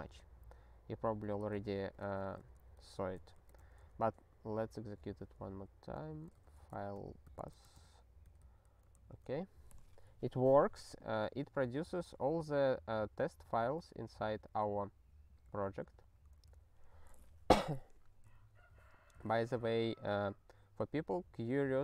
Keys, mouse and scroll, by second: 1.3 ctrl+n, 1.5 ctrl+n, 2.4 ctrl+n, 2.5 ctrl+n, 3.2 ctrl+p, 3.4 ctrl+e, 5.9 click, 6.4-8.0 typing, 8.2 ctrl+n, 8.4 ctrl+n, 9.0 ctrl+e, 18.3 super+o.